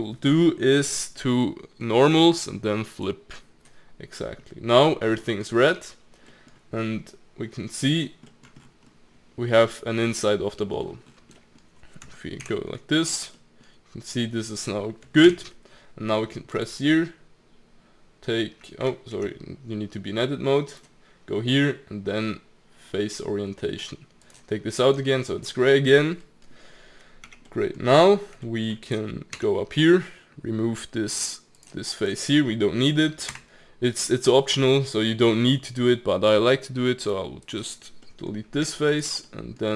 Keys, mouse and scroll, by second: 5.2 middle click, 5.6 Tab, 6.2-7.8 middle drag, 7.8 click, 8.2-8.6 middle drag, 8.6-9.7 scroll up 10, 9.7-10.3 scroll down 3, 10.3-10.7 middle drag, 10.7 scroll up 1, 10.8-11.4 scroll down 5, 11.4-12.4 middle drag, 12.4 alt+z, 13.3 scroll up 1, 13.3-15.2 middle drag, 15.2 alt+z, 16.5-18.8 drag, 18.8 Escape, 19.1 Tab, 20.7-23.8 drag, 25.4-26.0 scroll up 2, 26.0-27.2 middle drag, 27.2 Tab, 27.4 middle click, 27.9-28.4 scroll up 1, 28.4 shift+middle click, 28.6 scroll down 1, 28.9 click, 29.3 Tab, 30.0-31.6 scroll down 1, 31.6-32.0 drag, 33.3 Delete, 37.5 click, 38.0-38.6 middle drag, 38.6 Tab, 38.9 click, 39.2 middle click.